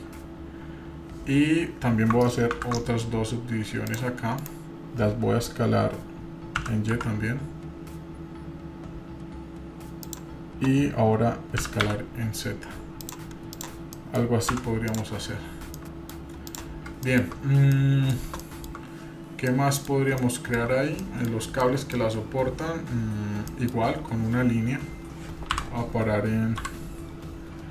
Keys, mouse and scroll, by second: 5.9-13.6 drag, 13.5 s, 13.9 middle click, 14.9 Tab, 14.9 click, 15.5 scroll up 3, 15.8 middle click, 16.5 click, 17.0-17.3 shift+middle drag, 17.5 scroll down 2, 17.7-18.1 middle drag, 18.4-18.8 shift+middle drag, 19.0-19.5 scroll up 3, 19.5-19.8 middle drag, 19.9 scroll down 1, 20.2-20.7 shift+middle drag, 20.9 scroll down 2, 21.0 middle click, 21.6-22.4 middle drag, 23.5-23.8 shift+middle drag, 23.9-25.5 scroll down 4, 25.5 KP_1, 26.5 KP_3.